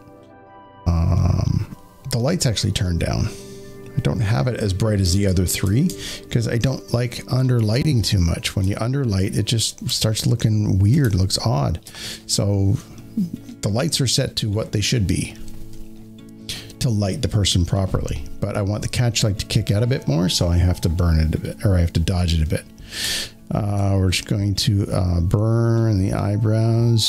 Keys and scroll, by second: 4.9 space, 5.2 space, 5.8 z, 7.6 space, 7.6 z, 7.9 space, 9.8-11.1 typing.